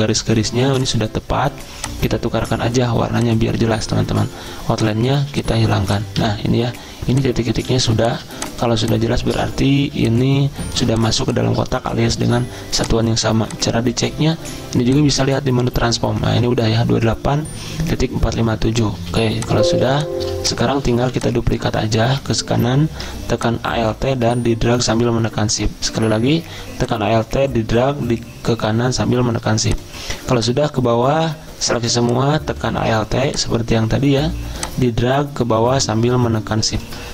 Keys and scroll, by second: 3.0 z, 5.2 z, 6.2 a, 7.7 z, 9.8 z, 12.2 v, 19.0-19.6 typing, 21.0 v.